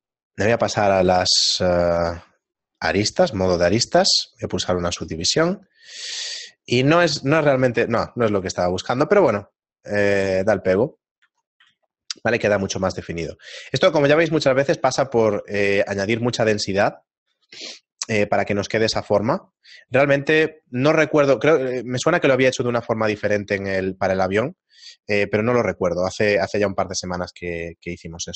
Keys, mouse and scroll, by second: 0.8 ctrl+Tab, 5.5 shift+middle click, 5.5 w, 8.8 shift+middle click, 12.8 a, 14.1 shift+middle click, 15.5 shift+middle click, 17.1 shift+middle click, 20.2 right click, 20.2 a, 25.2 right click, 26.5 a.